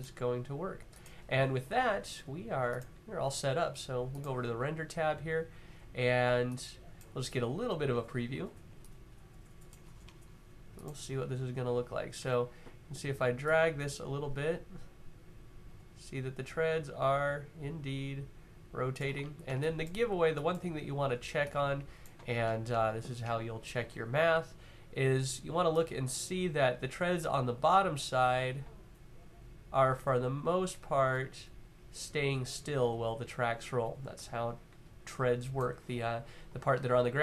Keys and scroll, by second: 11.8 w.